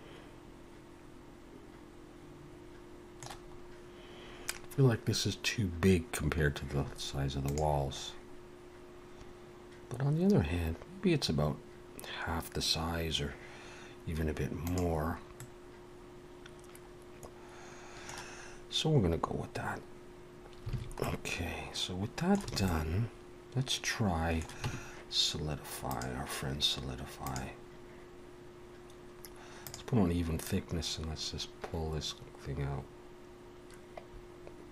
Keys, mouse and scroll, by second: 15.4 middle click, 20.7 alt+a, 21.0 middle click, 22.5 a, 22.6 middle click, 24.6 Tab, 25.9 click, 29.6 click, 30.5 click.